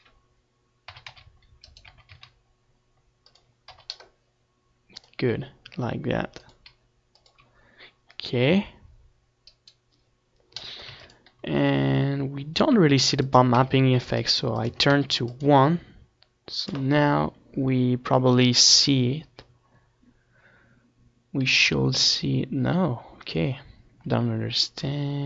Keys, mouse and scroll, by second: 1.0 g, 2.1 r, 3.4 KP_0, 4.8 r, 5.7-7.2 right drag, 5.8 r, 7.6 g, 7.9-8.9 drag, 9.0 click, 9.2 middle click, 9.8-11.9 drag, 13.6-19.2 right drag, 19.2-21.8 drag, 21.8-24.9 middle drag.